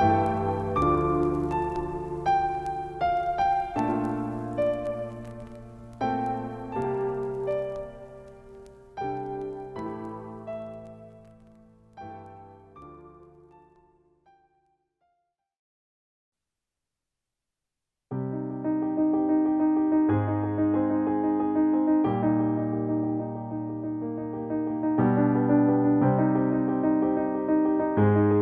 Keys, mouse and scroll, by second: 0.0-4.4 drag, 4.4 ctrl+z, 4.9 click, 6.5-14.2 shift+drag, 14.2 ctrl+space, 14.4 ctrl+click, 15.3 shift+click, 23.3 shift+right click, 24.4 click, 24.4 click.